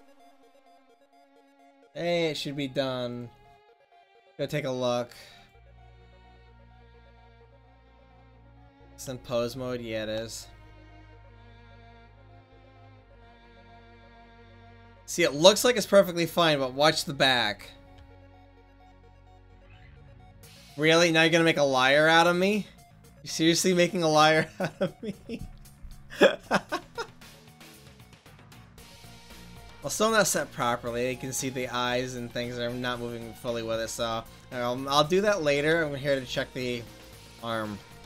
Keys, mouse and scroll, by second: 6.8-8.3 right drag, 8.8 middle click, 12.0 r, 15.5-17.5 middle drag, 18.0 r, 27.8-29.7 middle drag, 29.7 r, 36.5-38.0 right drag.